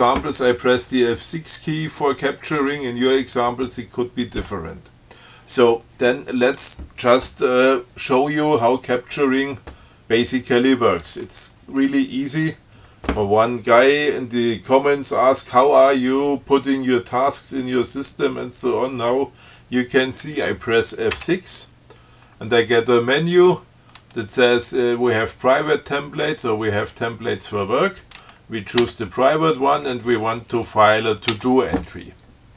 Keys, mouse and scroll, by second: 6.7 click, 21.4 F6, 29.1 p, 31.6 t.